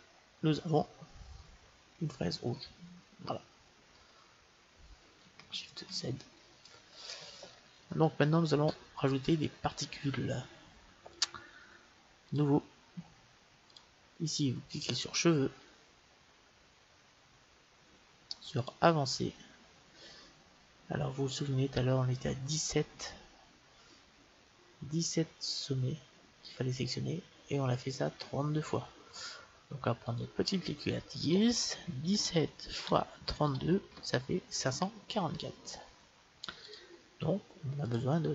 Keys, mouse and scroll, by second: 2.0-5.8 middle drag, 5.8 shift+z, 7.0-8.7 middle drag, 9.1-11.1 middle drag, 11.1-16.6 drag, 16.7-18.7 middle drag, 18.7-20.4 drag, 37.8-38.3 drag.